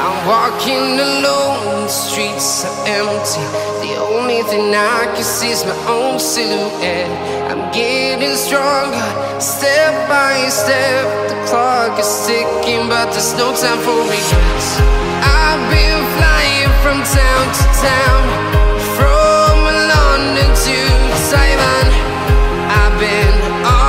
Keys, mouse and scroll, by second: 3.3 right click, 6.1 right click, 8.0 right click, 10.4 right click.